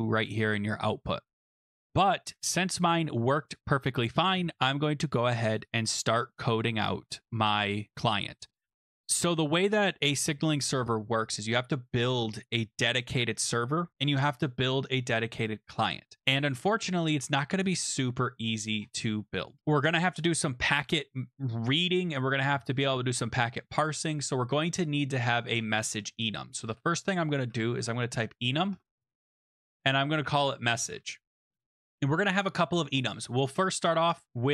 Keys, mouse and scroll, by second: 1.3 click, 5.6 click, 7.2-7.9 scroll down 6, 7.9-8.6 scroll up 14, 9.0-9.9 scroll, 16.2 click, 16.4-17.6 scroll, 17.6 click, 18.7 scroll, 19.5 click, 19.6 scroll, 25.3 click, 26.6 Return, 27.2-32.0 typing, 29.0 click.